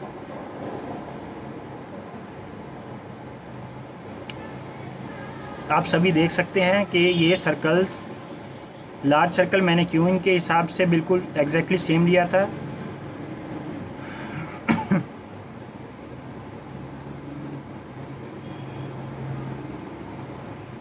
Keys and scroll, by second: 4.7-6.2 typing, 6.7 Return, 10.4 ctrl+-, 10.6 ctrl+-, 11.0 ctrl+-.